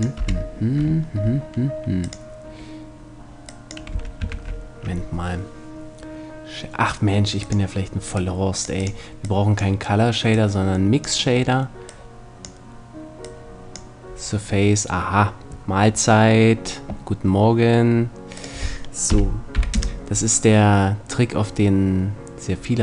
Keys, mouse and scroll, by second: 3.6 x, 3.8 click, 4.0 shift+a, 7.9-9.6 drag, 19.4 click.